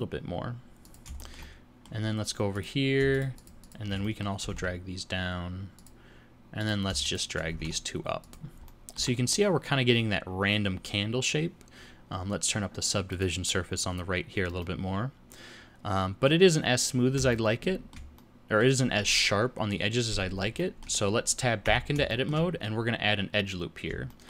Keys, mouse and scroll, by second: 1.2 shift+middle click, 2.5 click, 3.1 shift+click, 3.3 shift+click, 3.6 shift+click, 4.0 middle click, 4.4 g, 6.6 click, 7.0 shift+click, 7.5 g, 8.7 middle click, 9.0 Tab, 9.3 middle click, 13.1 click, 14.6 middle click, 17.3 shift+middle click, 18.2 middle click, 20.6 shift+middle click, 21.6 Tab, 22.1 shift+middle click, 24.1 shift+middle click.